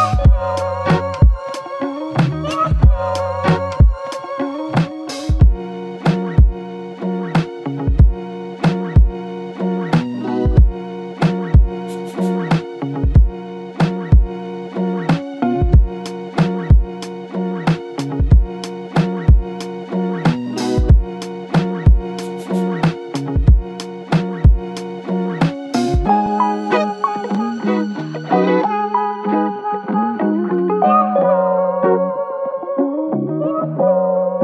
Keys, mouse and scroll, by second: 7.2 typing, 8.6 alt+click, 9.5 shift+click, 13.7 typing, 15.2 typing, 16.5 typing, 18.7 typing, 20.4 double click, 21.6 typing, 22.5 double click.